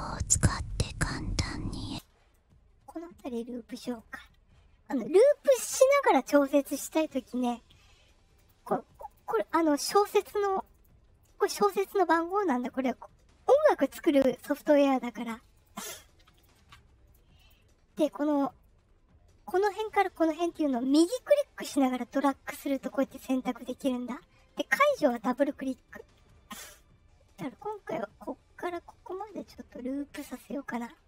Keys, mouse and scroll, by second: 1.7 space, 2.3-3.9 right drag, 8.3 click, 8.9 click, 9.0 click, 9.7 right click, 10.5 click, 10.7 click, 15.5 click, 16.2 click, 17.3 click, 19.7-22.2 right drag, 25.0 click, 25.2 click, 27.6-30.6 right drag.